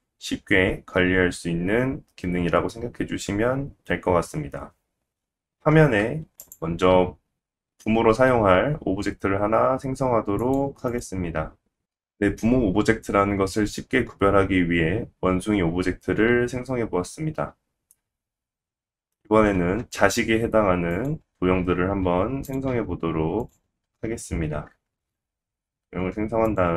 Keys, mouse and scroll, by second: 10.7-23.4 drag, 17.6 scroll down 1, 17.9 middle click, 19.5 shift+a, 22.0 s, 22.7 g, 24.5 shift+a, 24.7-26.7 drag.